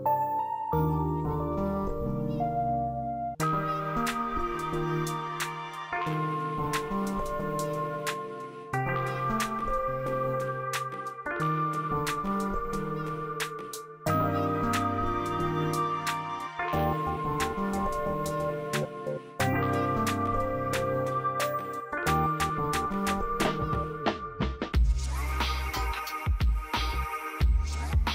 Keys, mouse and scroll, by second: 0.5 click, 1.1 right click, 1.9-4.5 drag, 4.8 right click, 5.8 click, 6.5 right click, 7.3 click, 10.6 Tab, 13.5 right click, 15.2 click, 15.9 right click, 16.8 click, 18.1 typing, 18.7-28.1 drag.